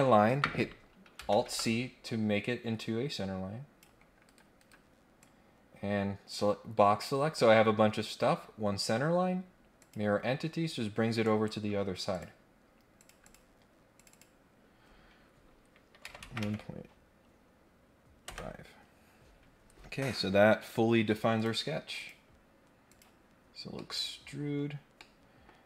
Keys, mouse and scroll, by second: 2.8-3.8 drag, 4.2 Escape, 4.5 Escape, 5.2-7.0 drag, 9.8 click, 11.2 right click, 12.1 click, 13.0 click, 13.2 click, 13.9 click, 14.1 click, 21.4 click, 22.0 click, 22.9 click, 23.8 middle click, 24.5-24.8 scroll up 1, 25.0 middle click.